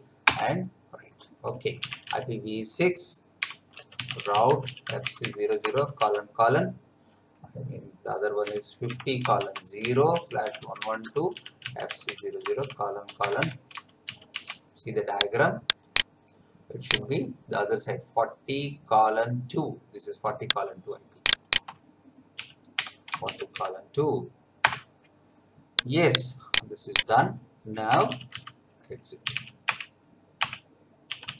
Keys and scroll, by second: 0.2 Return, 1.6-5.7 typing, 8.5-14.1 typing, 22.1-24.0 typing, 24.6 Return, 27.9 Return, 28.0-31.3 typing.